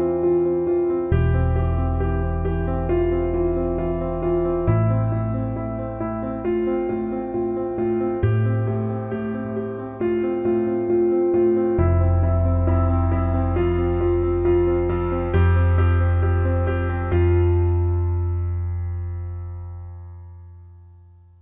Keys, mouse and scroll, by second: 3.0 shift+a, 4.9-5.8 alt+middle drag, 6.6 ctrl+z, 7.1-14.0 right drag, 14.5-14.9 alt+middle drag, 15.1 shift+a, 16.7 alt+middle click, 17.3 s, 18.6 alt+middle click, 20.2 alt+middle drag, 20.8 Tab.